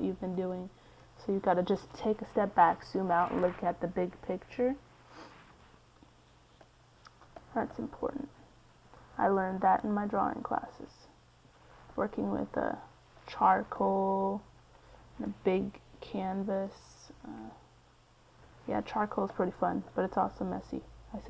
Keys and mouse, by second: 3.2 middle click, 4.0-6.9 drag, 6.9 middle click, 8.8-12.9 drag, 12.9 middle click, 15.0 f.